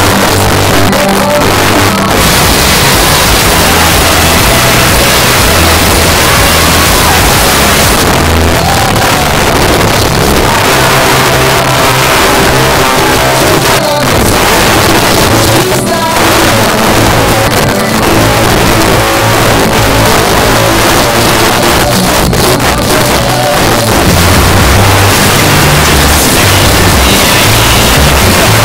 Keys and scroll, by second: 7.9 Page_Down.